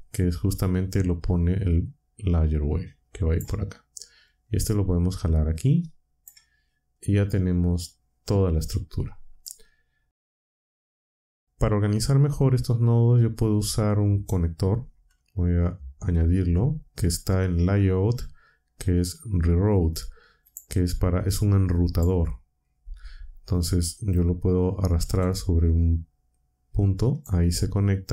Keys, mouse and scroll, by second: 1.1-3.5 drag, 4.2-6.4 drag, 9.4-10.4 drag, 12.3-14.4 drag, 16.1 shift+a, 20.4 click, 21.8 click, 25.0 g, 27.1 click.